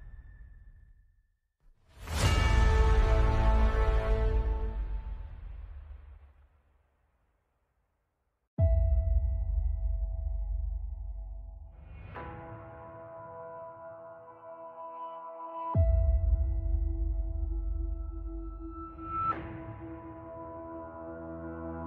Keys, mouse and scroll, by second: 0.9-2.6 right drag, 2.6-3.9 middle drag, 4.2 e, 5.7 Tab, 9.4 s, 9.7 shift+z, 11.2 shift+z, 15.5 right click, 15.7 KP_Decimal, 16.4 alt+c, 17.0 KP_5, 17.9 click, 17.9 Tab, 18.1 space, 18.8 space, 19.7 Tab, 20.0 x, 20.3 Tab.